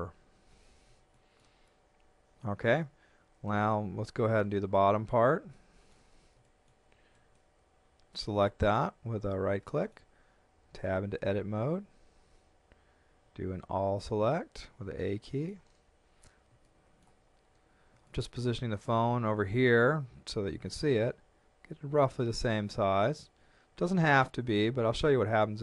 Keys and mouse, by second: 1.1 shift+middle click, 2.2 Tab, 2.8 middle click, 3.9 KP_1, 5.5 shift+middle click, 6.5 shift+middle click, 7.1 right click, 9.3 shift+middle click, 10.7 Tab, 13.2 a, 15.0 shift+middle click, 16.7 shift+middle click, 18.1 shift+middle click, 21.1 shift+middle click.